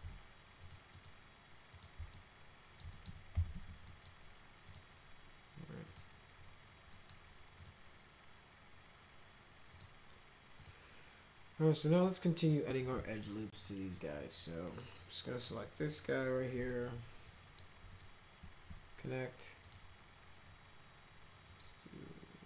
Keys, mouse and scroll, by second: 0.6 click, 0.8 right click, 1.6 click, 2.1 alt+middle click, 2.9 middle click, 3.0-4.0 typing, 3.8 middle click, 4.6 click, 5.8 click, 6.8 middle click, 7.5 click, 9.7 click, 10.5 click, 12.0 middle click, 12.9 middle click, 14.7 click, 15.5 click, 16.7 middle click, 17.2 click, 18.0 right click, 19.6 click, 21.5-22.4 drag.